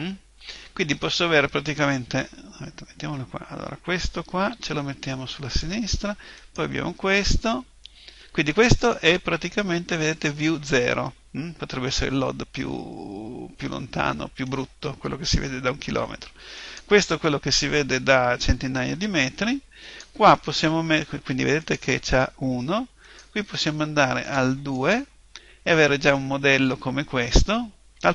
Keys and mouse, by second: 2.4-5.5 middle drag, 4.5 g, 5.6-7.6 drag, 6.4 right click, 12.9-16.6 middle drag, 16.6 right click, 24.2-26.3 drag.